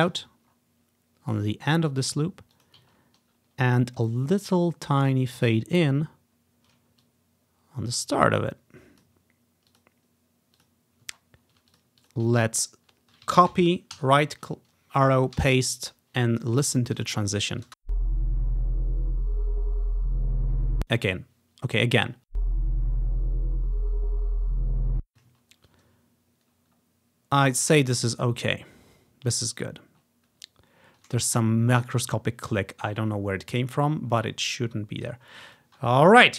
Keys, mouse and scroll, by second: 0.6-2.1 ctrl+scroll down 5, 2.6 click, 3.0-3.5 ctrl+scroll up 2, 4.1 ctrl+scroll up 1, 5.0 ctrl+scroll up 1, 5.3 ctrl+scroll down 1, 5.6 ctrl+scroll up 1, 5.9 ctrl+scroll down 2, 6.5 ctrl+scroll up 1, 7.1 click, 9.2 click, 9.9 click, 11.3-11.6 ctrl+scroll down 1, 11.8 click, 12.1 click, 12.4-13.0 scroll down 2, 13.6 ctrl+c, 14.1 Right, 15.5 ctrl+v, 17.1 click, 17.4 ctrl+scroll up 1, 17.8 space, 20.8 space, 22.4 space, 24.9 space, 25.7-26.6 ctrl+scroll up 1, 26.6 scroll up 1, 27.5 scroll up 2, 28.3-29.0 scroll up 1, 29.0 scroll up 1, 29.7-32.5 scroll down 1, 32.8-34.3 ctrl+scroll down 1, 34.3-34.8 ctrl+scroll up 1, 34.8-35.2 ctrl+scroll down 1, 35.5 click, 35.6 click.